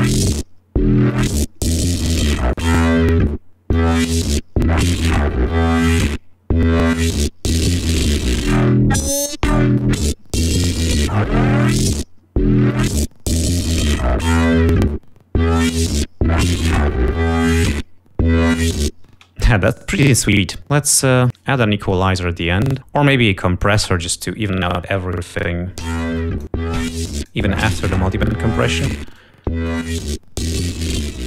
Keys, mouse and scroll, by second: 0.0 click, 2.4 click, 3.6-11.1 drag, 14.9 ctrl+scroll up 2, 18.3 space, 19.8 double click, 24.6 click, 26.5 l, 26.8 click, 28.0 click, 30.0 click, 30.9 click.